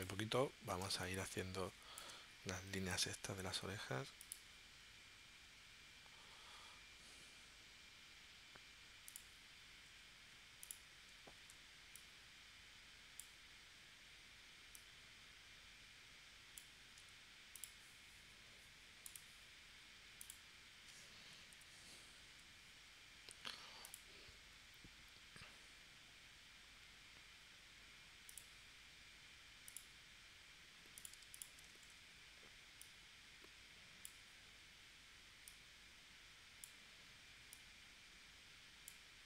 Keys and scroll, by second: 0.8 space, 2.7 p, 11.4 shift+c, 17.0 a, 21.5 p, 31.8 shift+c.